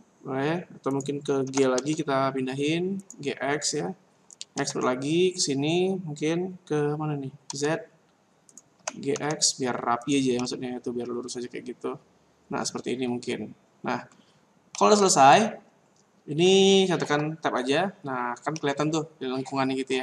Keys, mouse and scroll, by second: 1.4 g, 4.5 e, 8.5 click, 8.8 g, 10.3 middle click, 14.7 middle click, 17.0 Tab, 18.5 middle click.